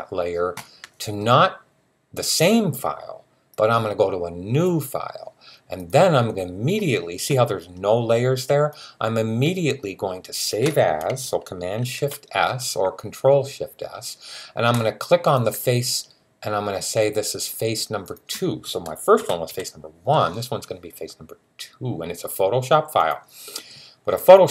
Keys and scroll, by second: 11.7 shift+super+s, 19.3 2.